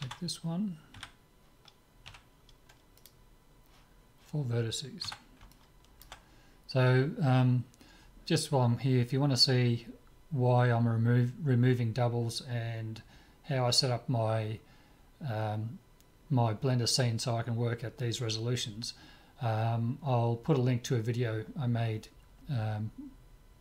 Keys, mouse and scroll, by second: 0.0 Tab, 1.0 a, 1.2 right click, 2.1 w, 5.0 Tab, 5.5-8.0 middle drag.